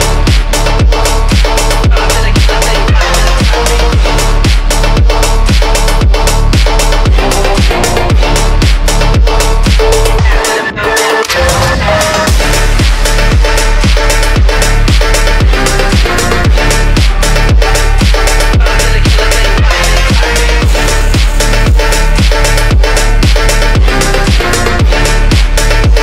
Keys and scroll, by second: 4.1 F3, 5.5 ctrl+z, 6.8 ctrl+z, 10.2 ctrl+z, 11.7 ctrl+Page_Down, 12.3 F3, 12.4 Escape, 14.0 F3, 14.0 Escape.